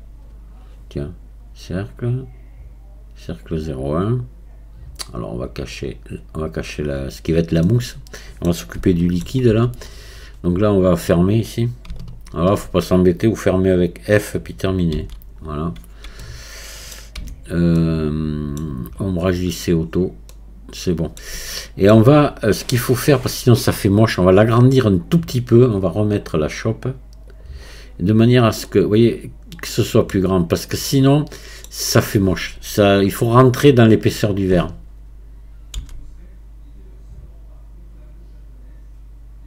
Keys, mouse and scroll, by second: 3.5-7.7 drag, 7.7-9.5 middle drag, 9.5 Tab, 10.2-12.0 scroll up 2, 12.0-13.0 alt+drag, 13.0-14.0 scroll down 1, 15.0 f, 15.4 scroll down 1, 16.2-17.2 middle drag, 17.2 Tab, 17.8-19.0 middle drag, 19.0-20.3 right drag, 20.3-24.5 middle drag, 27.3 click, 28.0 scroll up 2, 28.7-33.9 middle drag.